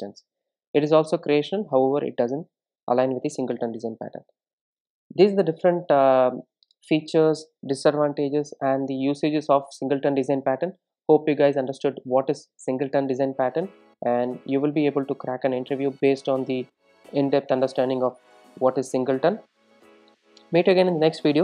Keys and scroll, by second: 4.2 super+s.